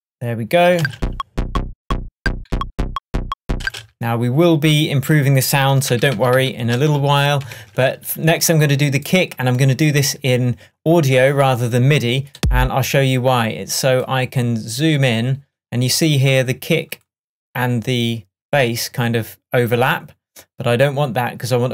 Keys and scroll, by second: 3.7 space, 5.9 super+d, 7.0 shift+super+d, 7.0 shift+super+`, 7.6 shift+Tab.